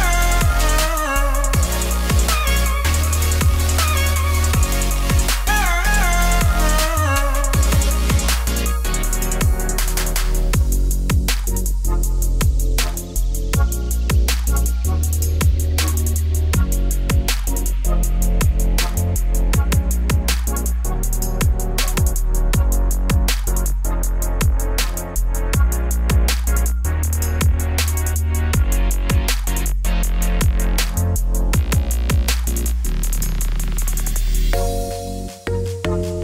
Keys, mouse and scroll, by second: 4.8 scroll up 1, 5.0 shift+middle click, 6.0-7.7 drag, 7.7 scroll down 8, 9.2 a, 11.0-13.4 middle drag, 13.4 3, 13.8 click, 14.1 2, 14.4 alt+click, 15.3 KP_Divide, 15.5 middle click, 15.9 3, 16.2 shift+click, 17.1 u, 18.1 u, 18.8 ctrl+alt+click, 19.3 u, 19.5 middle click, 19.7 a, 22.8-24.5 middle drag, 24.5 click, 26.2-28.0 drag, 28.2 middle click, 28.2-28.8 scroll down 3, 28.8-30.0 scroll up 6, 33.8-34.8 shift+drag, 34.8-35.5 scroll down 4, 35.5-36.2 shift+middle drag.